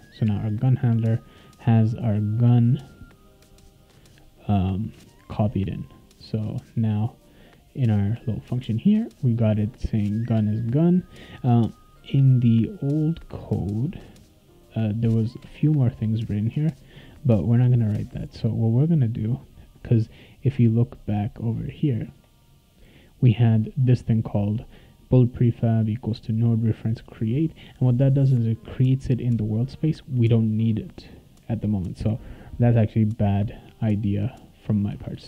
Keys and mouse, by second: 0.0 click, 1.9 click, 2.0 click, 3.3 click, 6.7 click, 8.2 click, 9.2 click, 22.0 click, 22.5-23.9 drag, 34.0 click, 34.9-35.2 typing.